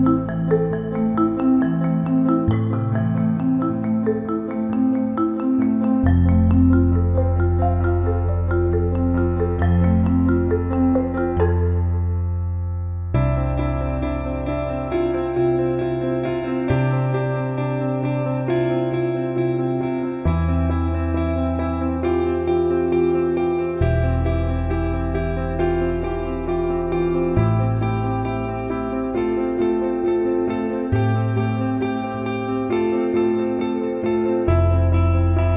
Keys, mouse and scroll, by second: 1.1 middle click, 2.2 alt+middle click, 3.9 click, 5.2 ctrl+KP_Add, 6.4 middle click, 8.1 e, 10.6 alt+middle click, 11.1 click, 11.3 alt+middle click, 11.8 alt+shift+middle click, 12.1 alt+middle click, 13.1 click, 14.8-21.2 drag, 22.0-23.5 drag, 24.8-25.8 shift+drag, 26.2-28.7 shift+drag, 28.8 click, 31.7-35.5 shift+drag.